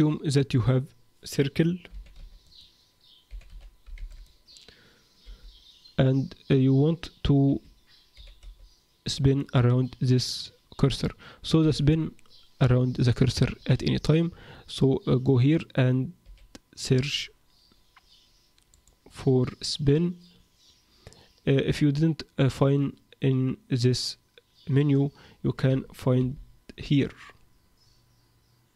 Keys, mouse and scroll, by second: 1.9 r, 3.2 r, 5.2 g, 8.1 g, 9.8-10.7 scroll up 1, 10.7-11.2 scroll up 1, 14.3 Tab, 16.2 s, 18.7 click, 26.2 t, 26.9-27.9 scroll down 2.